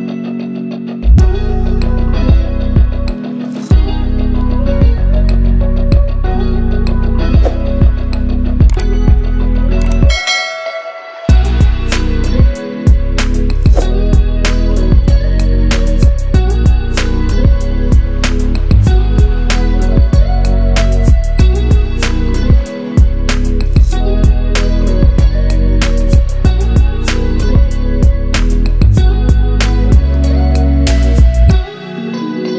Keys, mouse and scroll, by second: 3.4 b, 4.1 click, 6.9 scroll up 1, 7.6 scroll up 1, 8.9-11.2 drag, 13.9 ctrl+t, 14.6-16.0 drag, 21.3-29.4 right drag, 29.7-31.1 drag.